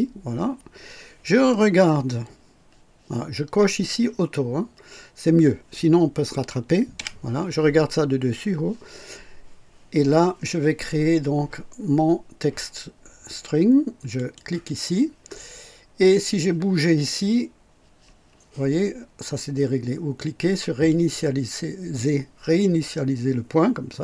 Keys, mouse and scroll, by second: 6.9 KP_2, 14.1 click, 20.8 click.